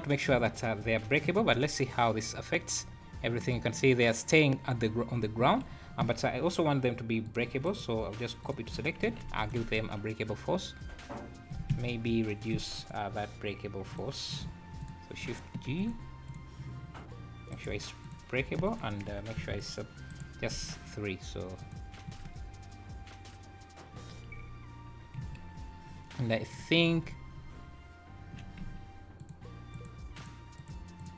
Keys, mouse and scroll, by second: 1.4 space, 5.5 Escape, 7.3 click, 7.6 right click, 9.1 alt+a, 9.4 click, 9.5 space, 11.7 Escape, 12.8 click, 14.8 click, 15.7 shift+g, 17.5 right click, 18.6 click, 20.1 right click, 21.6 click, 22.1 space, 25.2 Escape, 27.0-27.3 scroll up 3, 28.6 z, 29.2 click, 29.7 click, 30.1 click, 30.6 click, 31.0 click.